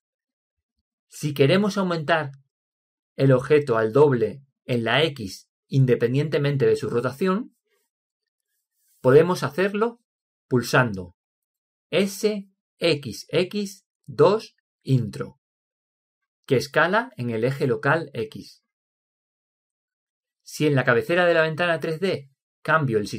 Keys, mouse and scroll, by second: 0.8 ctrl+z, 12.3 s, 21.4-23.1 drag.